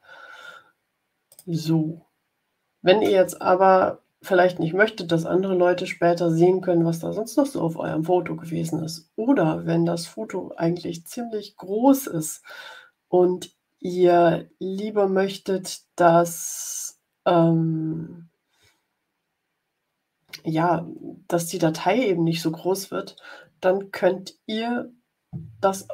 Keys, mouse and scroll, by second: 0.0 scroll down 2, 1.2 click.